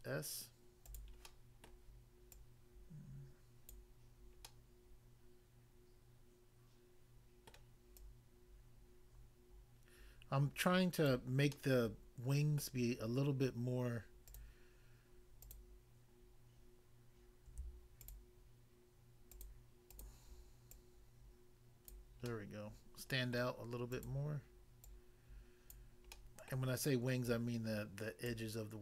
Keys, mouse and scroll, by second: 0.8 click, 1.0 click, 1.2 middle click, 1.7 middle click, 2.4 click, 3.8 click, 4.4 middle click, 7.5 middle click, 8.0 click, 11.0 click, 11.6 middle click, 12.6 middle click, 14.3 click, 14.4 click, 15.4 click, 15.5 click, 18.0 shift+click, 19.3 shift+click, 19.9 shift+click, 20.7 shift+click, 21.9 click, 22.3 middle click, 23.4 middle click, 23.9 click, 24.0 click, 24.8 click, 25.8 click, 26.1 middle click, 26.6 middle click, 27.3 click, 28.3 click.